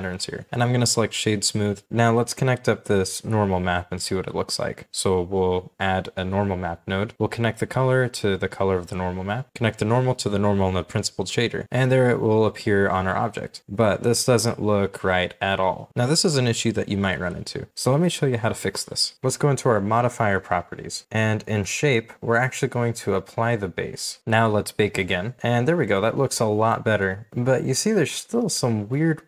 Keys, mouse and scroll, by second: 1.9-2.2 scroll down 1, 2.4 shift+middle click, 6.2-7.0 typing, 8.2-8.5 scroll down 1, 9.7-10.1 scroll down 1, 10.3 shift+middle click, 12.2 shift+middle click, 12.4-13.0 scroll up 1, 13.0-13.7 scroll down 3, 13.7 shift+middle click, 13.8-14.2 shift+scroll up 2, 14.2 scroll down 1, 14.6 middle click, 17.3-17.7 scroll down 1, 18.5-19.0 scroll up 1, 24.5-25.0 scroll down 1, 25.8-26.7 scroll up 1, 26.7 middle click, 28.9 shift+middle click.